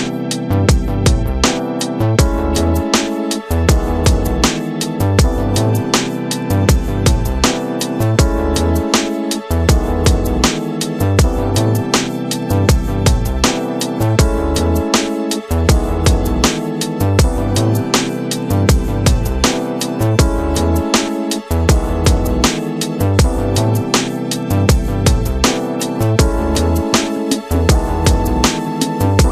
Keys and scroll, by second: 2.9 Return, 3.6 shift+F2, 4.3 ctrl+d, 4.4 ctrl+space, 8.0 ctrl+alt+d, 8.1 Return, 8.9 shift+F2, 9.7 ctrl+d, 9.9 ctrl+space, 10.3 ctrl+g, 12.9 ctrl+space, 13.5 Return, 17.7 ctrl+space, 20.0 space, 20.2 w, 22.3 Return, 23.8 shift+F2, 24.3 ctrl+d, 24.5 ctrl+space, 29.2 space.